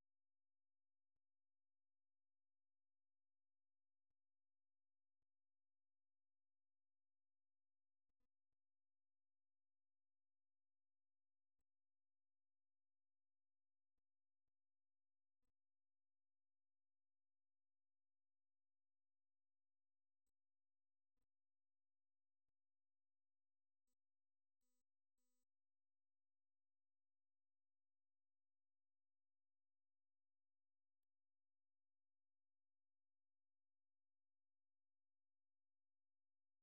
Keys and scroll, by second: 12.2 ctrl+f, 13.4-14.6 typing, 22.4 Return, 23.4 Return, 23.8 Return, 24.2 Return, 24.5-25.2 Return, 25.4 Return, 28.3 Escape.